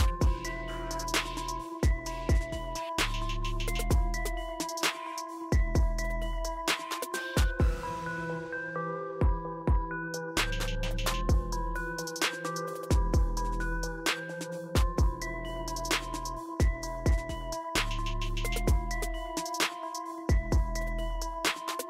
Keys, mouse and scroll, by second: 1.0 click, 4.2 Scroll_Lock, 11.5 click, 13.3 click, 15.7 ctrl+Num_Lock, 15.7 click, 17.9 click.